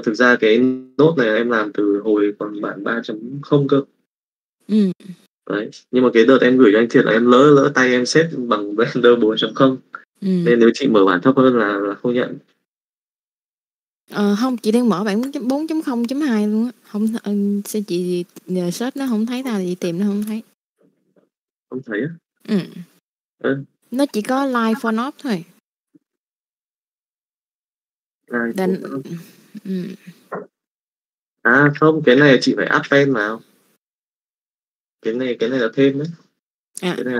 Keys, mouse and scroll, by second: 16.0 click, 21.5 click, 22.8 middle click, 23.9 click, 27.0 click, 29.6 Tab, 30.8 click, 31.3 n, 31.6 n, 32.0 n, 32.8 n, 33.2 middle click, 34.0 click, 34.7 click, 35.9 click, 36.5 click.